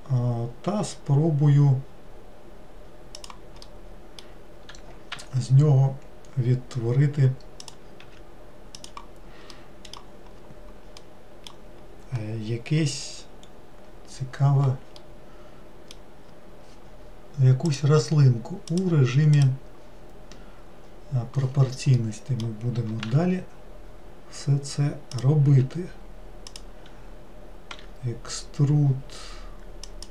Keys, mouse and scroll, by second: 3.8-5.3 middle drag, 5.3 e, 9.7-13.5 middle drag, 13.5-15.1 scroll up 2, 15.1-17.8 middle drag, 17.8 click, 18.8 click, 22.1-23.2 middle drag, 23.2 e.